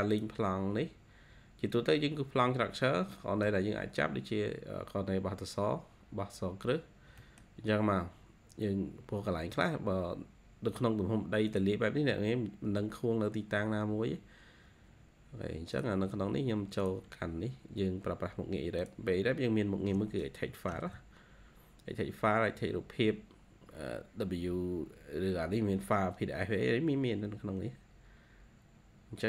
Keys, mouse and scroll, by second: 3.0 middle click, 5.0-6.0 scroll up 1, 6.7-7.1 scroll down 2, 7.3 middle click, 10.1-11.1 scroll up 2, 20.6 ctrl+q.